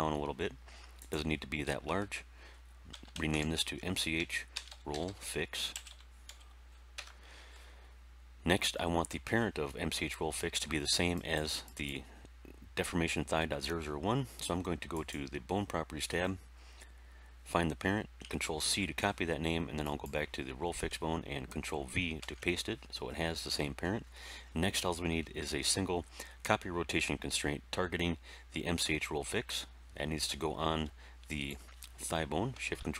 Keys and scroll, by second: 2.8-6.2 typing, 6.9 Return, 18.5 ctrl+c, 22.1 ctrl+v, 23.4 Tab.